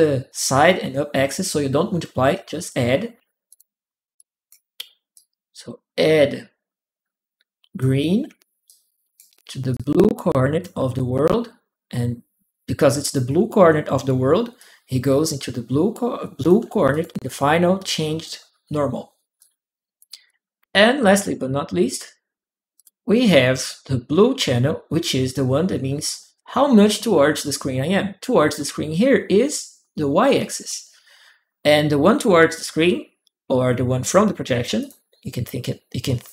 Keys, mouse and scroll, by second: 2.9 a, 3.3 click, 3.4 a, 3.9 click, 4.9-7.6 drag, 8.5 ctrl+click, 9.5 ctrl+click, 12.8 ctrl+click, 14.3-16.2 ctrl+drag, 16.7 ctrl+click, 19.2 ctrl+click, 20.1 ctrl+click, 22.6 ctrl+click, 32.6 ctrl+m, 33.8 click, 34.6 click, 35.9 m, 36.0 click, 36.2 m.